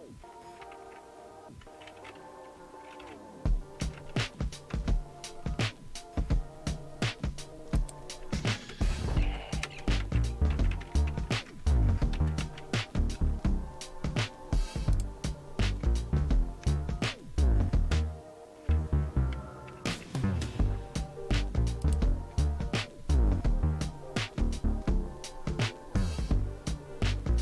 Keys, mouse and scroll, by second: 0.6 alt+super+r, 2.7-4.4 typing, 4.7 Return, 7.8 click, 8.0-13.6 typing, 14.9 click, 15.4 click, 16.2-16.9 typing, 19.7 ctrl++, 19.9 ctrl++, 21.8 ctrl+click, 22.4 click, 24.4-25.2 scroll down 1.